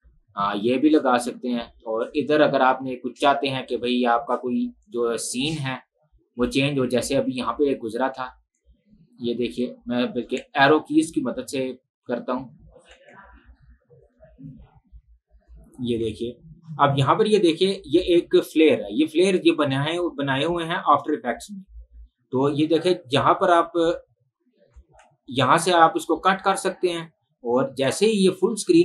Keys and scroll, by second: 6.7 space, 10.4 Right, 13.1 Left, 16.0 Left, 21.8 Right, 23.2 Left, 25.1 Right, 26.8 Right, 27.9 Right.